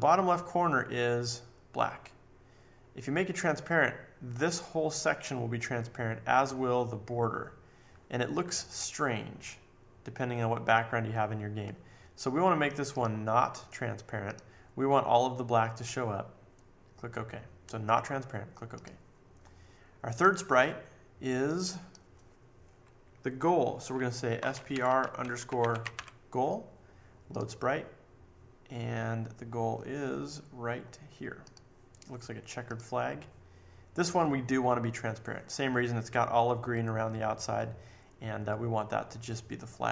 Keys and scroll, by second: 24.1-26.4 typing.